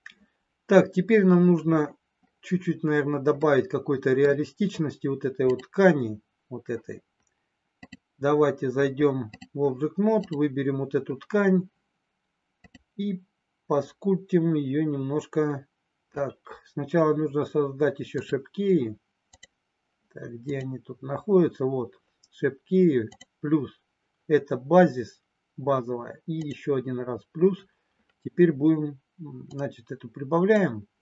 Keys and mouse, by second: 3.4 middle click, 5.5 click, 8.0-9.4 drag, 12.5-16.0 drag, 18.1 click, 23.1 click, 29.5-30.6 drag.